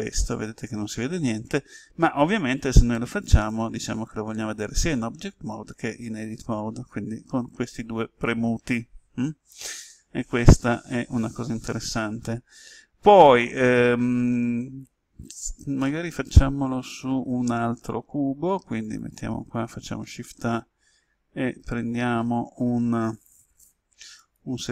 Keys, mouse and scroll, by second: 13.1-16.2 middle drag, 18.8 click, 19.9 shift+a, 24.2 click.